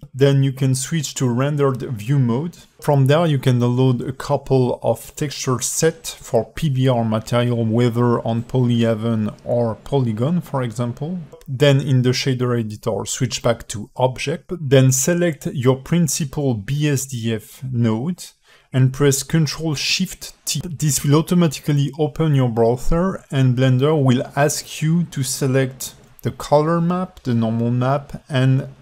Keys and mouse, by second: 3.4-4.1 alt+middle drag, 4.7 KP_5, 5.9-8.5 alt+middle drag, 9.2 KP_0, 13.1 click, 17.6 alt+shift+middle click, 18.4-19.0 drag, 19.2 g, 20.3 ctrl+t, 20.3 click, 20.3 x, 21.3 ctrl+shift+t.